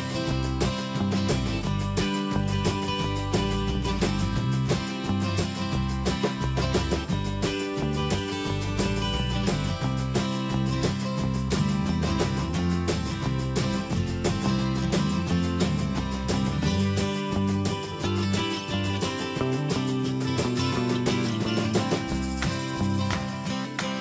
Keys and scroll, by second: 20.2 ctrl+z, 20.8 Escape.